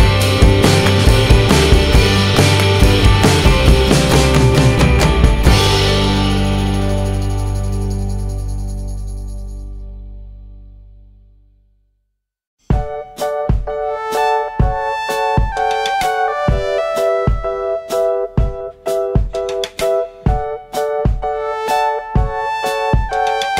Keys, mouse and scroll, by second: 1.0 click, 1.1 click, 2.8 click, 3.0 click, 3.6 click, 3.7 click, 5.6 click, 5.8 click, 6.9 click, 6.9 click, 7.0 click, 7.1 click, 8.0 double click, 8.1 double click, 8.4 double click, 8.5 double click, 9.5 double click, 9.6 double click, 10.5 click, 10.6 click, 11.8 click, 12.0 click, 12.3 click, 12.5 click, 14.2 click, 14.3 click, 15.5 click, 15.7 click, 16.0 click, 16.1 click, 16.4 click, 16.7 click, 16.9 click, 17.2 double click, 17.3 double click, 17.5 double click, 17.5 double click, 17.6 double click, 17.7 double click, 17.9 double click, 17.9 double click, 18.2 middle click, 19.0 scroll up 1, 20.3 click, 20.4 click, 21.2 click, 21.4 click, 22.8 click, 22.9 click.